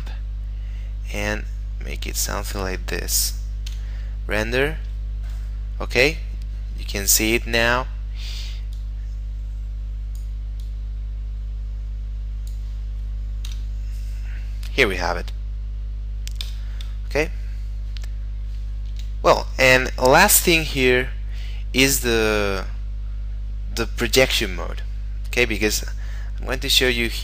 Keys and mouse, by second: 0.3 click, 3.7 F12, 7.6 Escape, 8.8 click, 13.5 F12, 16.5 Escape, 19.7 middle click, 23.7 middle click.